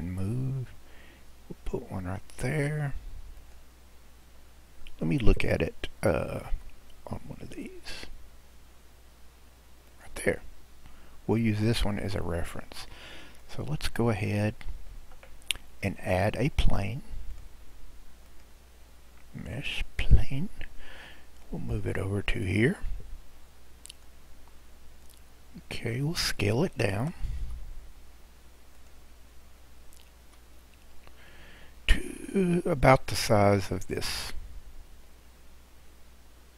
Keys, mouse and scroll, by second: 6.5 g, 12.7 scroll, 13.5 click, 13.8-14.6 scroll down 6, 17.3 click, 18.3-21.4 drag, 21.7 click, 24.3 scroll, 24.5-24.8 scroll up 3, 24.8 scroll, 25.8 scroll, 27.4 s, 29.2 scroll, 30.2 s, 33.4 click.